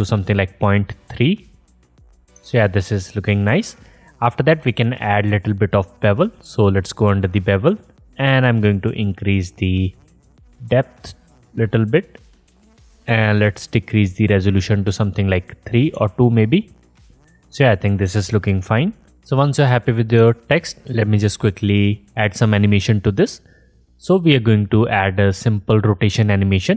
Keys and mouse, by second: 2.8 alt+drag, 3.0 alt+click, 3.1-6.3 alt+middle drag, 6.3-26.7 drag.